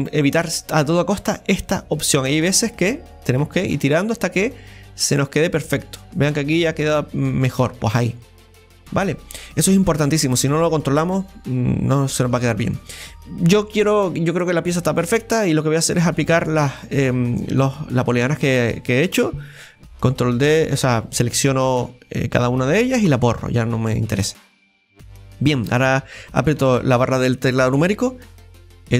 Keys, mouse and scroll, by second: 2.8-5.8 drag, 8.1 scroll down 2, 8.3-11.3 middle drag, 12.0-14.4 middle drag, 14.4-16.9 right drag, 16.9-18.8 drag, 18.8 right click, 20.3-23.1 right drag, 23.6 scroll down 1, 23.9-26.7 middle drag, 26.7 KP_Divide, 28.5 ctrl+shift+b.